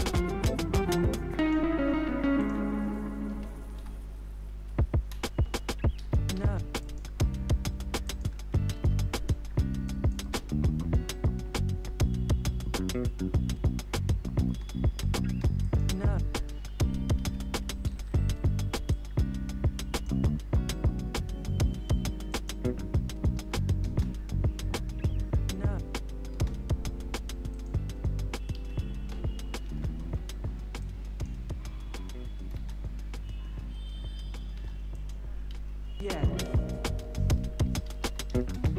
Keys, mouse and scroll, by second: 0.0-0.9 typing, 1.4 click, 3.0-4.2 typing, 4.5 Down, 5.1 Return, 5.9 ctrl+a, 6.3 ctrl+c, 6.8 click, 8.7 ctrl+v, 9.1 click, 10.2 space, 14.4 space, 15.6 click, 16.2 u, 17.1 ctrl+a, 17.8 ctrl+d, 18.9-22.3 drag, 23.4 [, 23.8 space, 26.3 space, 27.5 click, 28.5 ctrl+a, 29.6 alt+[, 30.8 click, 31.8 [, 32.5 space, 34.5 space, 34.9 click, 35.5 ctrl+a, 36.7 ctrl+shift+c, 37.4-38.7 typing.